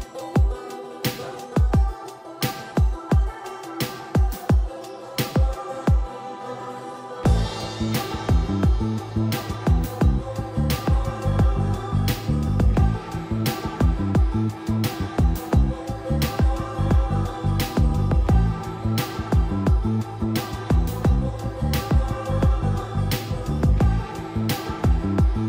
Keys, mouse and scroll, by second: 0.8 typing, 2.1 r, 2.8 shift+middle click, 4.0 click, 4.2 right click, 5.8 click, 6.1 right click, 6.8 click, 8.1-10.5 typing, 12.0 click, 14.4-14.8 scroll up 1, 15.4 Escape, 15.7-17.1 typing, 17.6 click, 21.3-21.6 scroll up 1, 21.6 click, 22.2 shift+scroll up 1, 22.9 click, 23.4 shift+middle click, 24.3 right click.